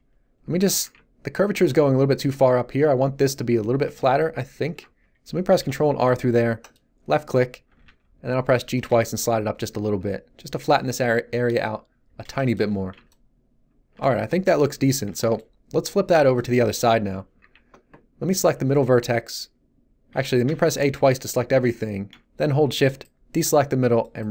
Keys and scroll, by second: 5.5 ctrl+r, 7.6 g, 8.8 Tab, 17.4 Tab, 20.1 a.